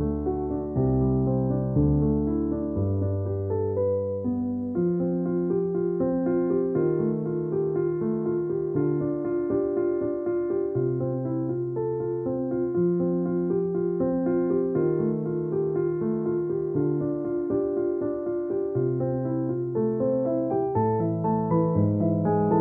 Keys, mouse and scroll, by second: 0.4 alt+click, 1.5 alt+click, 5.6 alt+click, 6.4 alt+click, 8.4 alt+click, 8.6 alt+click, 10.5 alt+click, 11.1 alt+click, 16.0 space, 16.1 click, 16.3 space, 17.6 alt+click, 19.4 alt+click, 21.0 alt+click.